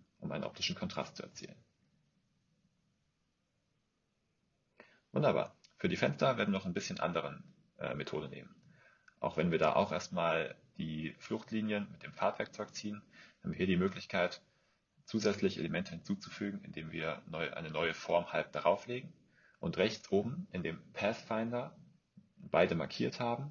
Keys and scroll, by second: 5.3 BackSpace.